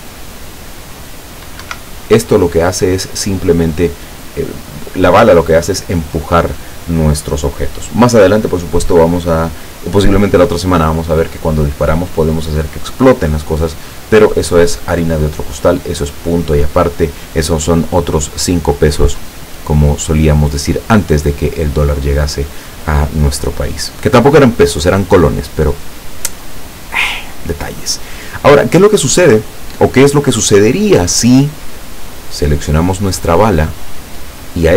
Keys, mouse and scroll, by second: 1.7 Escape, 28.6 click, 32.8 right click.